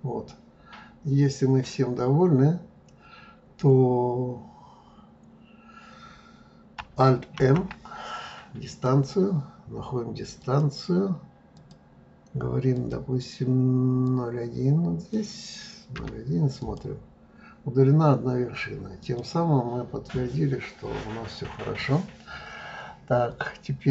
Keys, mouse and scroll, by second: 7.4 alt+m, 10.4 click, 11.6 click, 12.8-15.8 drag, 19.0 click, 19.8-20.4 scroll down 2, 20.4-20.9 scroll up 1, 20.9-22.2 scroll up 3, 22.2-23.9 scroll up 2.